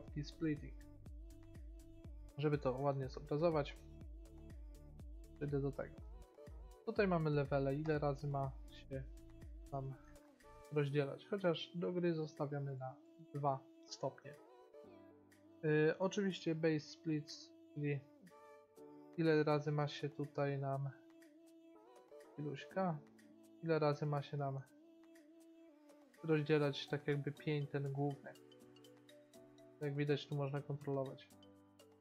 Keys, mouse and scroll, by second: 2.5-3.8 middle drag, 8.1-10.9 middle drag, 11.4 middle click, 11.8 middle click, 12.8-14.3 drag, 14.0-16.3 middle drag, 17.3-18.8 drag, 18.8-21.1 middle drag, 21.8 middle click, 22.8 click, 23.2-24.6 middle drag, 27.2-28.5 middle drag, 29.4-31.2 drag, 31.7-32.0 drag.